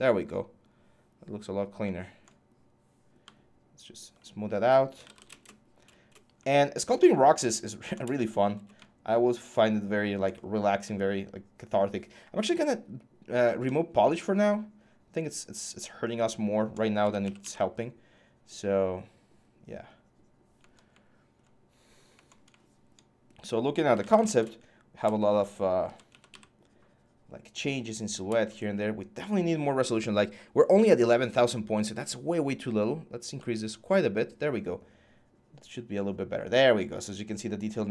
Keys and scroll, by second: 4.5-5.3 typing, 16.5-17.7 typing, 23.5-24.2 typing, 25.3-26.6 typing.